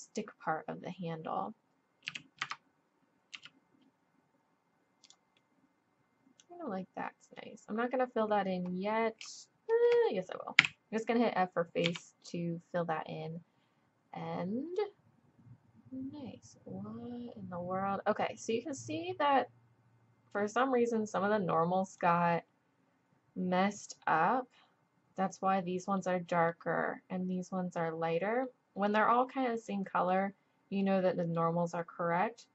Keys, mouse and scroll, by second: 2.1 e, 3.3 s, 5.4-7.3 drag, 8.7 middle click, 9.3 click, 10.6 f, 11.2 click, 11.8 z, 19.6 middle click, 26.2-27.8 middle drag, 27.8 click, 28.6-32.5 middle drag.